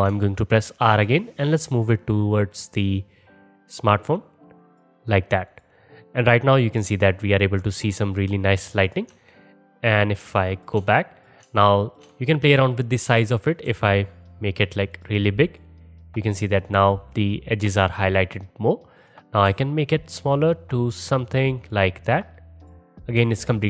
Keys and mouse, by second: 0.7 r, 5.5 click, 5.6 middle click, 5.7-8.9 drag, 8.9-13.3 alt+middle drag, 13.3 click, 13.4-15.4 middle drag, 13.7 s, 15.4 click, 18.8 middle click, 19.0 click, 19.1-21.6 middle drag, 19.5 s, 21.6 click, 21.9-22.6 middle drag, 22.6 click, 22.7-23.2 middle drag, 23.2 s.